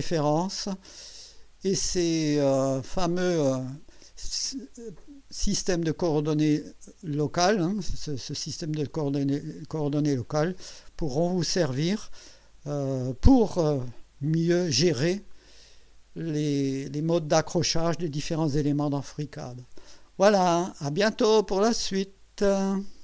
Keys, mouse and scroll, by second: 10.2-14.6 drag, 15.3-17.2 drag, 17.9-20.1 drag.